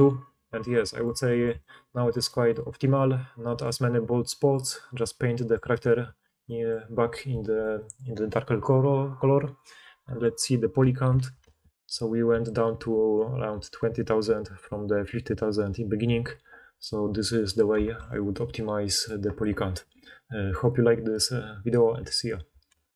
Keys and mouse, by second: 10.1 middle click, 10.1 right click, 11.0 shift+h, 11.4 alt+a, 16.8 alt+h, 17.8 alt+a, 18.3-22.9 drag.